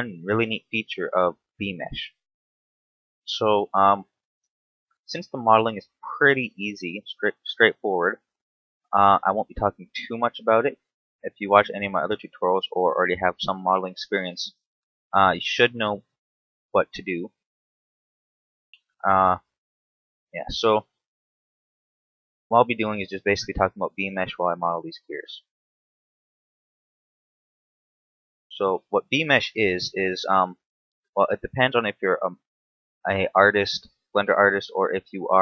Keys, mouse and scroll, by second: 4.6 shift+d, 6.1 ctrl+click, 6.9 click, 11.0 click, 12.9 click, 16.2 click, 17.9 click, 18.9 shift+middle click, 21.3 t, 21.6-22.3 scroll down 3, 22.3 shift+middle click, 23.1 shift+d, 25.8 ctrl+click, 26.2-26.8 scroll up 6, 28.2 click, 30.6-31.7 scroll down 2, 31.7 click, 32.8 scroll down 1, 33.3 shift+middle click.